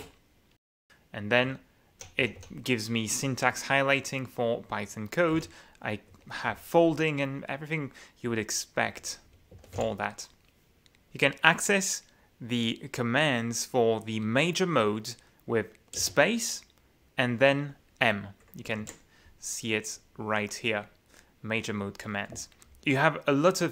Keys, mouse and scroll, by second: 1.5 k, 2.2 j, 5.1-6.1 typing, 9.0 alt+2, 9.4-10.3 typing, 16.0 space, 18.8 F9, 19.9-21.0 middle drag, 22.4 shift+F9.